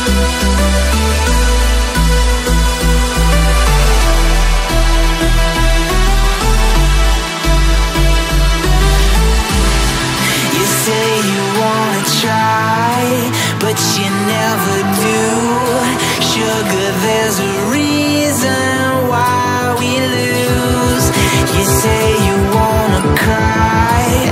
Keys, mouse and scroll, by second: 0.0-0.7 typing, 1.3 alt+scroll up 1, 5.5 shift+click, 6.2 shift+click, 8.6 Right, 8.7 Right, 8.7 Right, 9.2 Up, 9.4 Right, 11.0 double click, 12.8 alt+scroll up 1, 15.6 alt+scroll up 1, 15.6-16.0 alt+scroll down 2, 17.7 alt+scroll down 3, 18.9 alt+scroll up 1, 20.2 alt+scroll down 1.